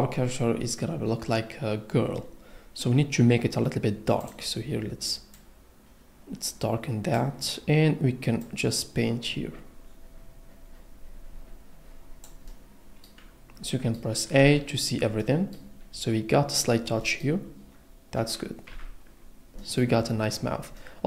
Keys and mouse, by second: 14.4 a, 18.7 Tab, 19.5 a, 20.7 click.